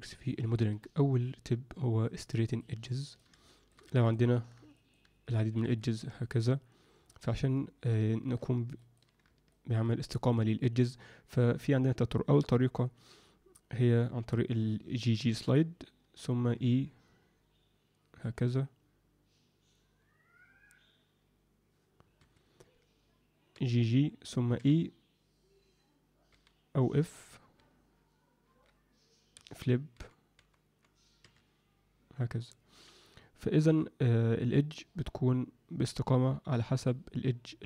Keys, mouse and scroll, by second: 0.2 alt+shift+middle click, 2.0 click, 2.5 click, 3.1 click, 3.4 alt+shift+middle click, 3.8 Tab, 4.3 Tab, 4.7 alt+middle click, 5.6 2, 5.9 click, 6.0 click, 7.1 middle click, 8.1 alt+shift+middle click, 8.7 ctrl+click, 9.5 ctrl+alt+middle click, 10.0 alt+middle click, 15.0 g, 23.5 g.